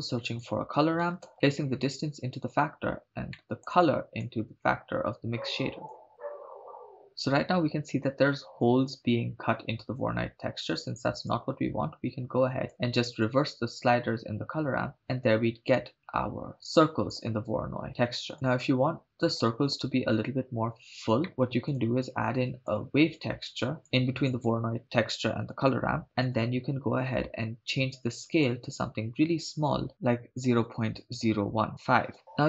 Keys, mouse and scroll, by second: 1.6-2.5 drag, 3.3 middle click, 4.2-6.1 drag, 11.3-12.7 drag, 13.7-15.0 drag, 18.3-19.5 drag, 21.2 middle click, 21.7 click, 22.0 click, 23.1 click, 23.3 click, 24.0 shift+a, 29.9-32.1 drag, 31.7 BackSpace.